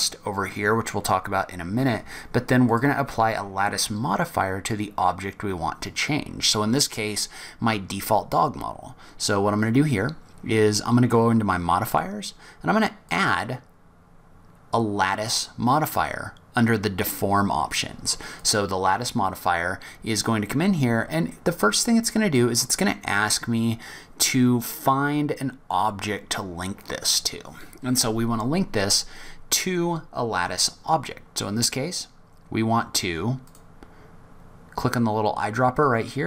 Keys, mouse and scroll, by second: 2.6 click, 11.8 click, 13.1 click, 33.4 click.